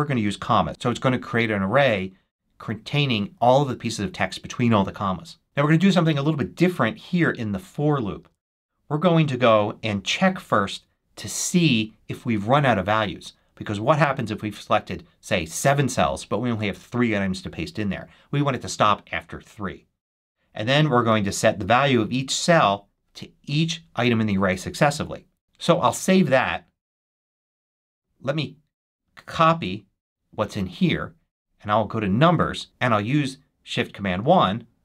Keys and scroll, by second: 8.1 super+v, 25.4 super+s, 26.3 super+Tab, 29.3 super+c.